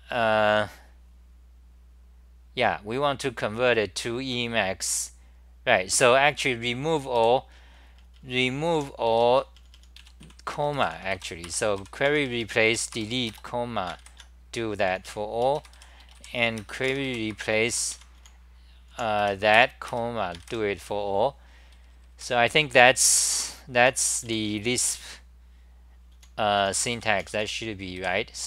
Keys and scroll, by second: 7.1-11.1 typing, 10.9 End, 11.5 Return, 11.7 Up, 12.0 Home, 12.4 n, 12.6 e, 12.9 Return, 15.0 n, 15.7 f, 16.8 End, 17.0 k, 17.3 Return, 17.6 Up, 17.9 Home, 18.1 s, 18.9 h, 19.6 Return, 21.7 d, 21.9 d, 22.1 d, 23.8 s, 24.8 ,, 25.9-27.9 typing.